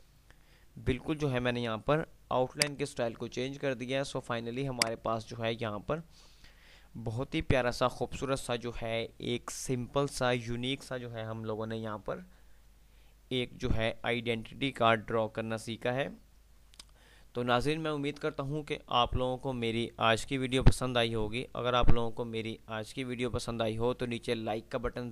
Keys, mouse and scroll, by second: 1.9 F2, 3.4 F3, 4.4 F2, 4.9-6.3 drag.